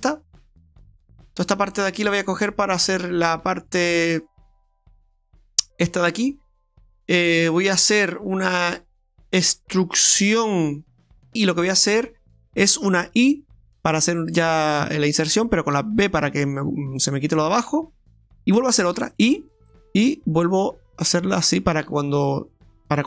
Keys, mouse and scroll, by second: 0.4 shift+right click, 1.5 shift+right click, 1.8 shift+right click, 2.0 shift+right click, 2.4 shift+right click, 2.7 shift+right click, 3.1 shift+right click, 4.1 shift+right click, 4.4 shift+right click, 4.9 middle click, 6.1 middle click, 11.3 middle click, 13.7 i, 19.0 i, 22.1 middle click.